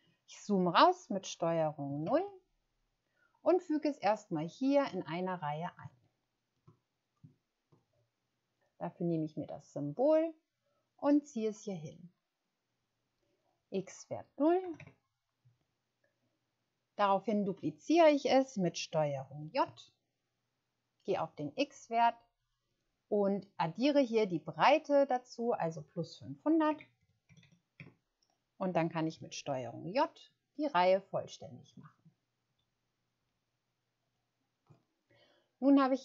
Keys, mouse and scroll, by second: 2.0 ctrl+0, 5.9-6.4 ctrl+scroll up 1, 14.6 0, 14.8 Return, 19.5 ctrl+j, 21.7 click, 26.7-27.4 typing, 27.7 Return, 29.5 ctrl+j, 30.2 ctrl+j, 30.9 ctrl+j, 32.4 ctrl+j, 33.2 ctrl+j, 34.0 ctrl+j.